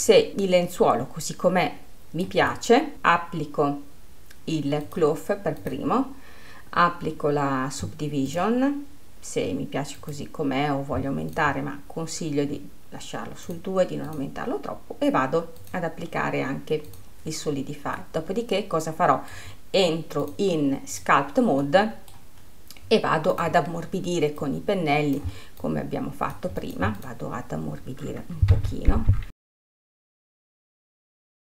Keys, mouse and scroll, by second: 0.1 scroll down 1, 0.2-2.9 middle drag, 2.9 click, 5.4-8.4 drag, 8.9-18.2 drag, 18.2-18.6 scroll up 1, 18.6-20.8 middle drag, 20.8 click, 22.2 middle click, 30.3 middle click.